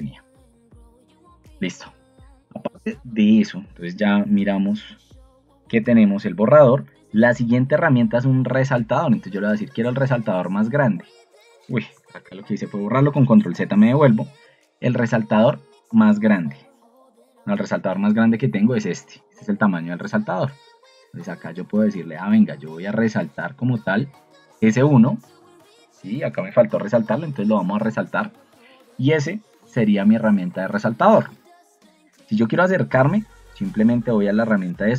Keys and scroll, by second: 12.0 ctrl+z.